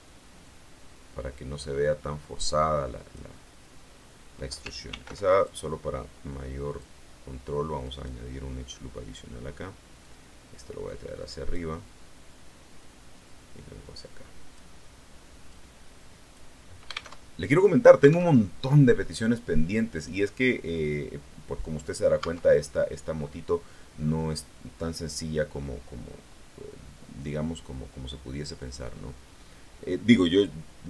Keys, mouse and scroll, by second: 0.3-3.2 drag, 4.8 ctrl+r, 5.2 ctrl+click, 6.6 click, 7.7 right click, 9.9-11.6 drag, 12.7-14.6 drag, 15.4 click, 17.0 alt+Tab, 18.3 alt+Tab, 19.8 right click, 21.8 scroll down 2, 22.1 Tab, 23.0-23.4 scroll up 2, 23.4 scroll down 2, 23.9 scroll up 2, 28.5 click.